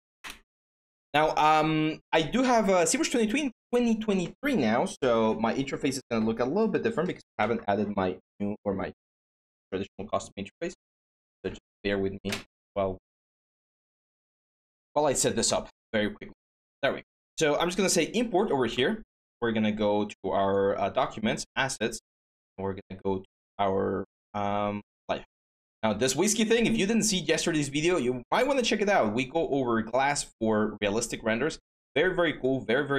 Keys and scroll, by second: 3.6 Return.